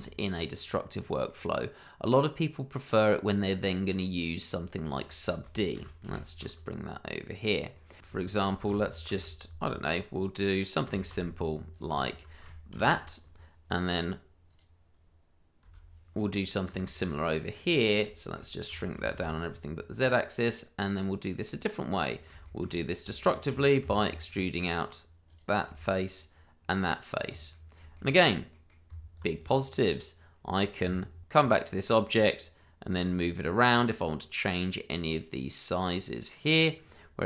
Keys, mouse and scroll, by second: 0.6 click, 0.9 scroll down 1, 1.2 middle click, 4.0 click, 5.0 shift+middle click, 5.6 middle click, 5.7 shift+d, 6.0 y, 7.3 click, 7.7 middle click, 8.0 click, 8.1 shift+middle click, 8.1 middle click, 8.3 shift+middle click, 10.4 click, 10.8 s, 11.1 z, 11.7 click, 12.0 shift+click, 12.1 click, 12.7 ctrl+KP_Subtract, 13.7 click, 15.6 h, 15.8 scroll down 1, 16.1 middle click, 17.0 shift+middle click, 17.5 middle click, 18.2 shift+middle click, 18.7 s, 19.0 shift+z, 20.0 click, 20.3 middle click, 21.4 Tab, 22.1 click, 22.4 shift+middle click, 22.7-23.1 scroll up 1, 23.1 shift+middle click, 23.2 middle click, 23.8 e, 24.5 click, 25.6 e, 27.0 click, 27.5 middle click, 28.0 shift+middle click, 28.5 middle click, 28.8 Tab, 29.3 click, 30.8 q, 31.7 click, 32.9 g, 36.8 click.